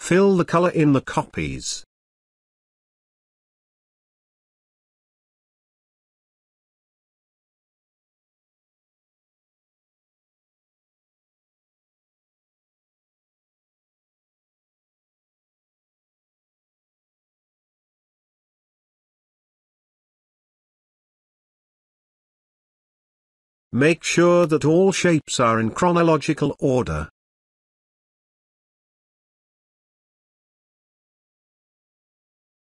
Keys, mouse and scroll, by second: 14.3 scroll down 1, 15.0-15.4 scroll up 1, 15.4 space, 15.8-17.9 ctrl+drag, 18.5-19.4 scroll up 1, 22.0 click, 23.8 right click, 26.8 click, 29.4 ctrl+z, 30.6 right click.